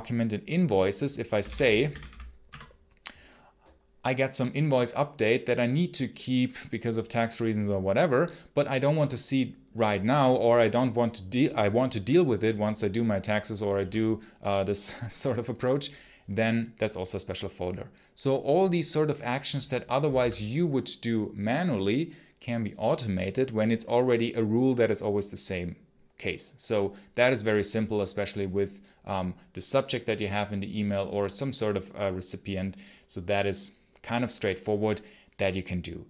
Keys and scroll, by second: 1.0-2.3 typing, 19.7-20.5 typing.